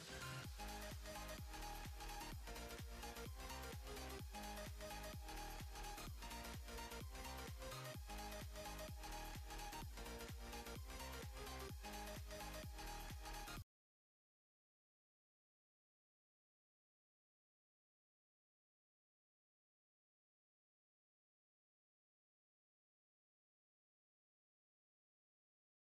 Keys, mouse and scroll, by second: 6.9-9.3 alt+drag, 9.8-11.8 drag.